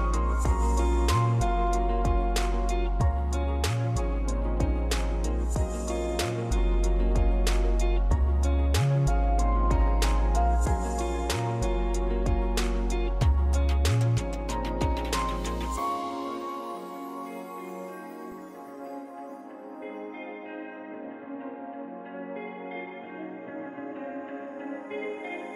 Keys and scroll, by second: 3.5 ctrl+s, 12.6 Tab, 13.2-14.8 typing.